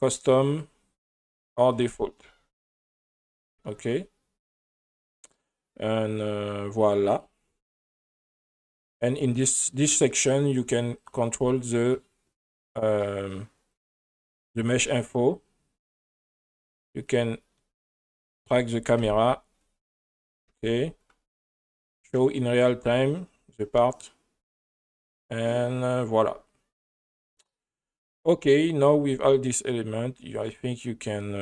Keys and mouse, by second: 0.5-1.8 drag, 6.2-7.3 drag, 11.0 click, 11.4 click, 13.7 drag, 14.8 click, 17.1 click, 19.0 KP_0, 20.5 KP_0, 21.8 click, 22.5 click, 24.8 click, 26.8 click, 28.8 click.